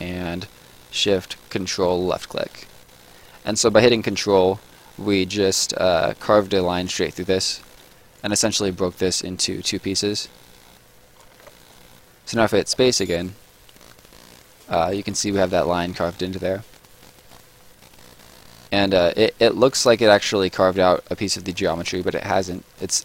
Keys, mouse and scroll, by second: 2.0 ctrl+shift+click, 2.3 shift+click, 7.7 Escape, 8.1 click, 9.2 w, 10.2 click, 11.3 ctrl+click, 11.3 ctrl+z, 12.2 right click, 12.7 space, 13.6 right click, 16.7-17.7 scroll up 1, 17.7 right click, 21.3 right click, 22.7-23.0 scroll down 1.